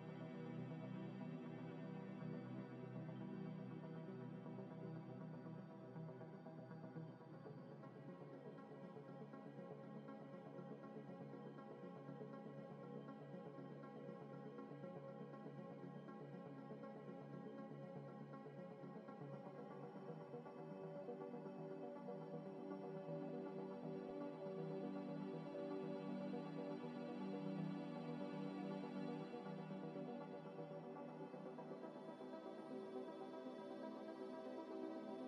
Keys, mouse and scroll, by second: 5.2 m, 5.4 i, 7.1 Tab, 7.6 Tab, 7.8 a, 8.8 u, 9.1 u, 9.9 Tab, 10.2 Tab, 10.5 a, 11.5 u, 12.5 scroll down 1, 13.8 scroll up 1, 14.3 a, 15.0 g, 16.2 scroll up 1, 17.6 scroll down 1, 18.2 g, 19.2 s, 20.1 y, 20.9 s, 21.1 Tab, 21.7 Tab, 22.1 Tab, 24.3 Tab, 24.6 a, 25.4 a, 25.8 g, 26.9 s, 27.2 y, 28.5 x, 31.1 scroll up 1, 31.6 g, 32.9 g, 33.9 g, 33.9 s, 34.7 g.